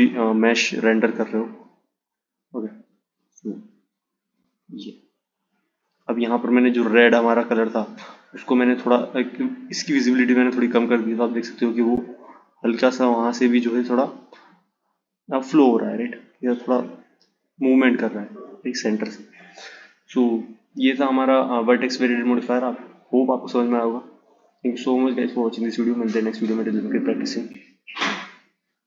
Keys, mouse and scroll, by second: 1.5-4.6 drag, 8.9 click, 14.7-17.7 drag, 19.2 click, 22.9-26.0 drag.